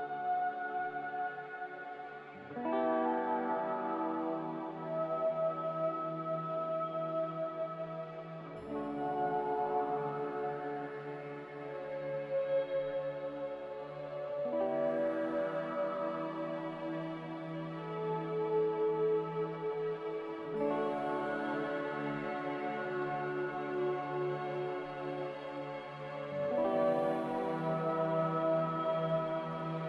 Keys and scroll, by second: 11.4 1, 18.8 ctrl+z.